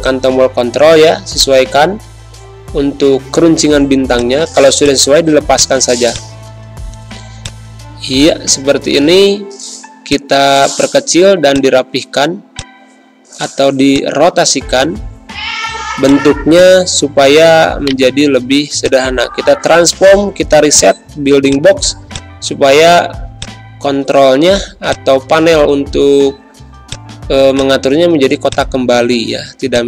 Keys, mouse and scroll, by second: 5.1-8.5 typing, 5.5 click, 6.0 click, 7.4 click, 7.9 click, 10.0 shift+v, 10.0-16.0 shift+drag, 21.1 z, 21.4 click, 21.9 space, 22.0 click, 22.4 v, 23.3-29.8 shift+drag.